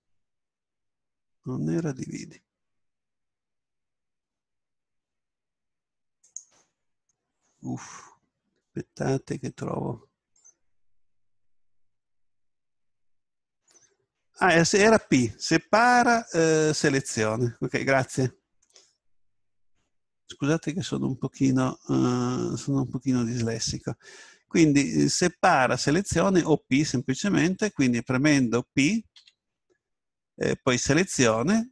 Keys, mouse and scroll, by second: 1.9 Tab, 6.3-8.1 drag, 29.2 p.